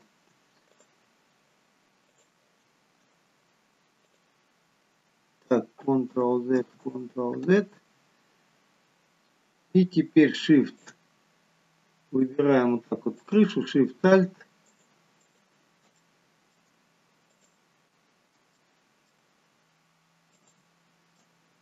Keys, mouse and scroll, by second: 0.8 click, 4.0 click, 6.1 ctrl+z, 6.8 ctrl+z, 10.8 alt+shift+click, 12.2 click, 13.2 alt+shift+click, 15.2 alt+shift+click, 16.1 middle click, 17.3 alt+shift+click, 18.6 middle click, 20.4 alt+shift+click, 21.4-21.6 scroll down 2.